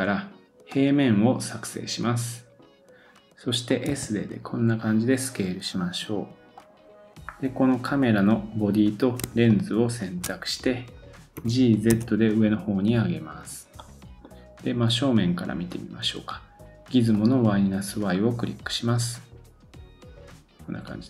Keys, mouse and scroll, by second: 6.7-7.2 scroll down 9, 7.2 scroll up 2, 7.8 click, 9.5 shift+click, 11.3 g, 13.8 middle click, 17.1 click, 18.1-20.2 scroll up 1, 20.2 scroll up 1, 20.3-21.0 scroll down 3.